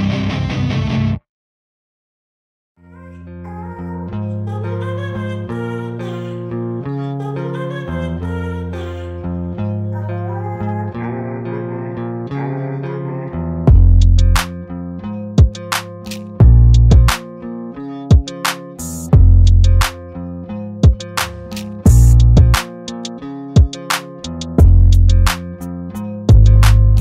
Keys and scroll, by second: 1.3 m, 3.2 Return, 4.2 m, 5.9 Return, 6.7 e, 7.3 space, 7.7 p, 8.3 2, 8.7 Return, 10.4 m, 11.8 Right, 12.8 space, 16.8 r, 19.4 Return, 20.4 m, 21.5 Return, 21.8 space, 22.3 l, 23.9 Return, 25.5 space.